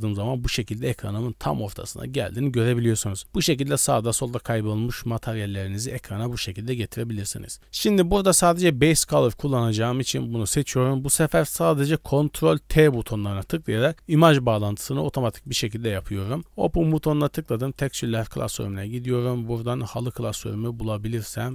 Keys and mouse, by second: 6.2 click, 10.0 click, 12.8 ctrl+t, 15.5 click, 16.3 click.